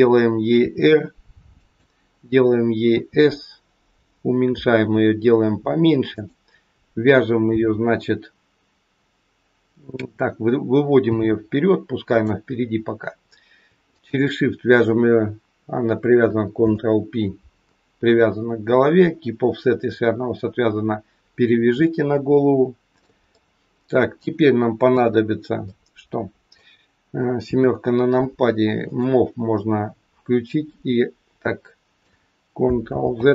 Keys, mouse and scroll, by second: 0.5 r, 2.7 s, 9.5-11.0 scroll down 3, 11.0 g, 12.7-13.6 scroll up 3, 13.9 shift+click, 16.6 ctrl+p, 21.9 shift+middle click, 23.4 middle click, 24.7 KP_3, 25.6 middle click, 27.4 KP_7, 28.7 click, 30.4 click, 32.9 ctrl+z.